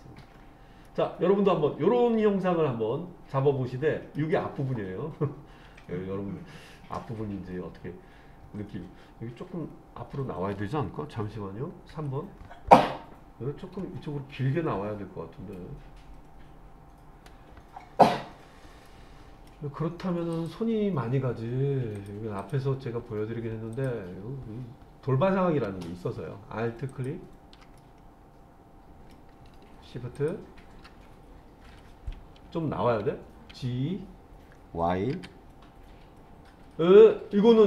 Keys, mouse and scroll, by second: 0.3-0.9 scroll down 2, 0.9-4.2 middle drag, 11.9 KP_3, 18.9-19.6 middle drag, 20.4 click, 22.0 click, 22.4 click, 23.8 click, 26.9 alt+click, 27.8-29.1 middle drag, 30.2 shift+click, 31.7 KP_3, 33.5 g, 35.1 y.